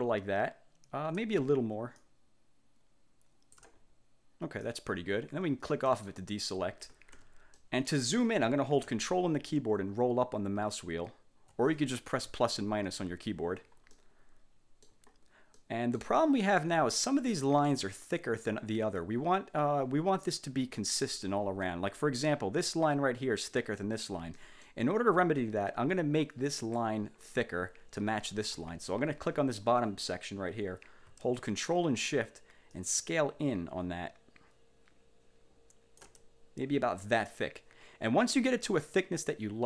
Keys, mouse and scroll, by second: 2.1-3.9 ctrl+shift+drag, 4.8 click, 6.0 click, 7.3 1, 7.7 click, 10.8-11.3 ctrl+scroll up 4, 12.4 =, 12.7 -, 13.0 =, 14.0-15.2 middle drag, 15.7 click, 17.4 click, 24.5 click, 26.7 click, 32.8-36.3 ctrl+shift+drag.